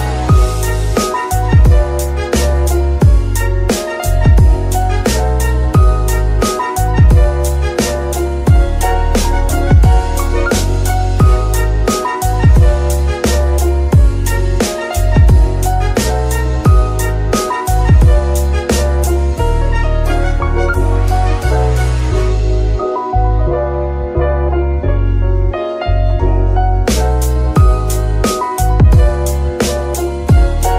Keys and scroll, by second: 0.9 KP_7, 2.6 g, 4.9 KP_3, 8.6 KP_7, 9.6 g, 21.7 ctrl+r, 28.9 KP_9, 28.9 KP_0, 29.0 Return.